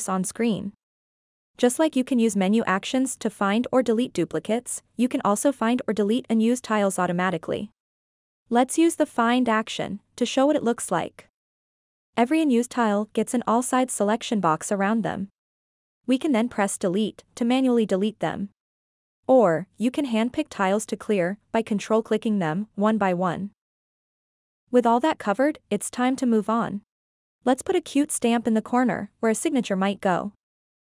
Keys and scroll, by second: 22.7 Delete, 24.0 ctrl+z.